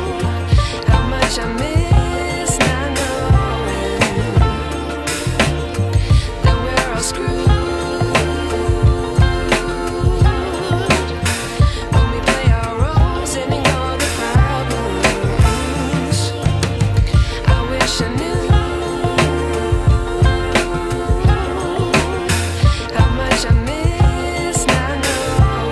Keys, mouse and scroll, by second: 2.8 ctrl+d, 3.1-5.0 drag, 7.7 ctrl+], 10.1 right click, 11.3 click, 12.3 ctrl+t, 13.8-14.7 alt+shift+drag, 18.9-21.1 shift+drag, 22.6 ctrl+e, 23.9-25.7 drag.